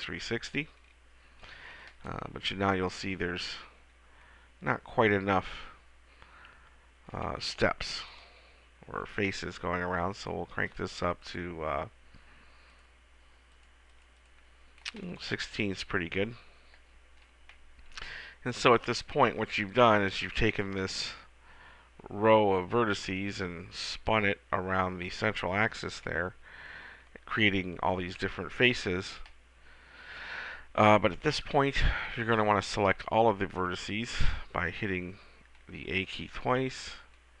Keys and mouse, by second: 4.1-10.6 middle drag, 16.0-17.7 middle drag, 31.1-32.8 middle drag, 32.8 a, 33.0 a.